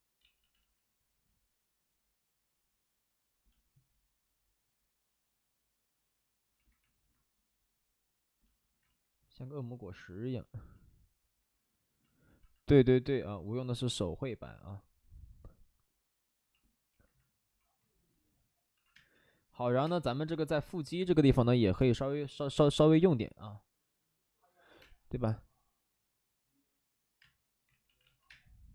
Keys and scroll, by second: 0.2 ctrl+z, 0.3 ctrl+z, 0.5 ctrl+z, 8.8 ctrl+z, 18.7 alt+s, 18.9 space, 19.7 s, 20.3 space, 20.4 space, 27.2 space, 27.6 ctrl+z, 27.8 ctrl+z, 27.9 ctrl+z, 28.2 space.